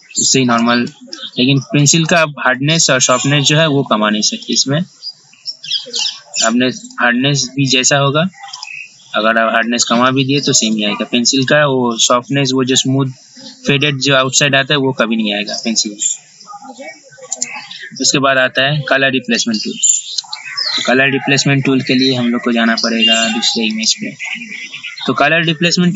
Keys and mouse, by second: 17.5 right click, 19.4 click.